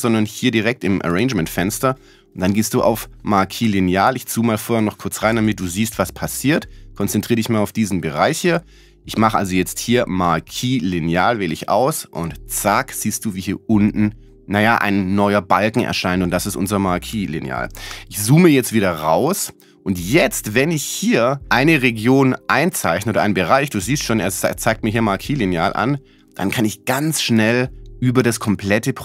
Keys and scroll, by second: 17.4 z.